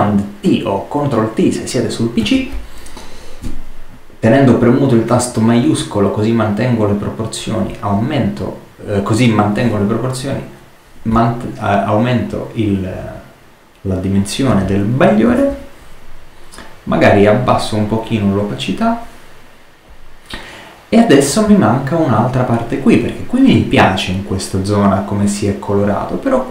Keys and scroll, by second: 2.1 super+t.